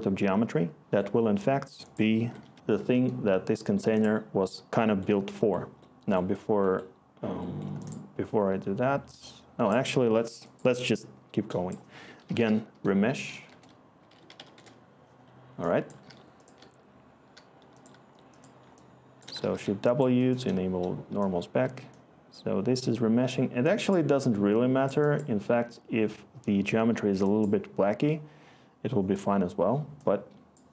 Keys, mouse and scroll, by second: 2.1 Tab, 2.3 typing, 11.9 Tab, 12.1-13.1 typing, 14.3-16.0 typing, 17.3-17.8 typing, 19.3 shift+w, 19.6-20.3 click, 20.1 click.